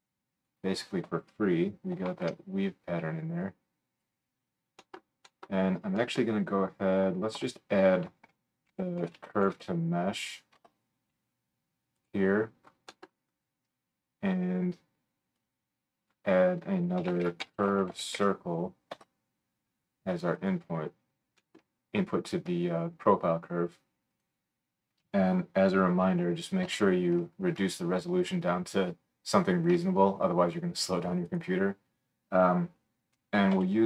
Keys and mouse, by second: 0.6-3.6 drag, 2.0 ctrl+x, 3.4-5.1 middle drag, 3.4 right click, 7.4 F3, 12.1 click, 12.8-15.3 right drag, 15.3-20.5 middle drag, 20.5-23.5 right drag, 23.5-33.8 drag, 24.1-33.8 middle drag, 24.1-33.8 right drag.